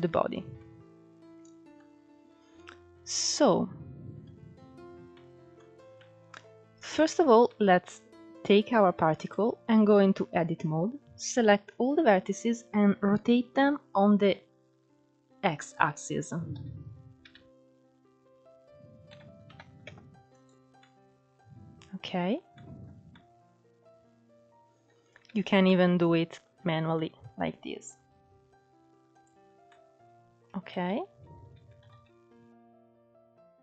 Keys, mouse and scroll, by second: 0.0 scroll down 3, 0.3-6.5 middle drag, 3.8-5.4 scroll up 10, 5.4-5.9 scroll down 1, 6.5 scroll down 2, 6.7 shift+middle click, 7.6 click, 8.3-9.6 middle drag, 9.6-10.0 scroll up 1, 10.5 Tab, 12.0 a, 12.6-15.6 middle drag, 15.9 r, 20.1-24.6 middle drag, 24.6 ctrl+z, 25.0-26.7 middle drag, 26.7 r, 28.7 scroll down 2, 28.9 middle click, 29.7 scroll up 2, 29.9 ctrl+z, 30.2 ctrl+z, 30.7 ctrl+z, 31.9 r.